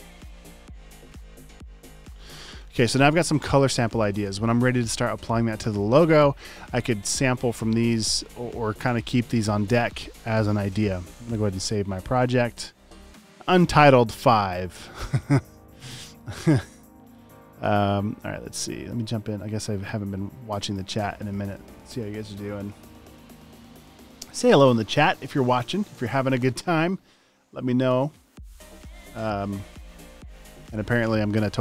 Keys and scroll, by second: 11.2 super+s.